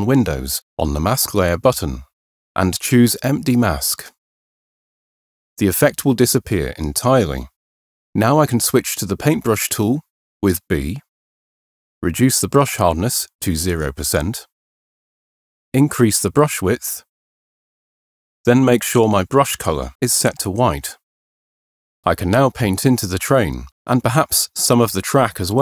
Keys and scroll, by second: 9.1 b, 15.4 ], 16.7 ], 17.9 ].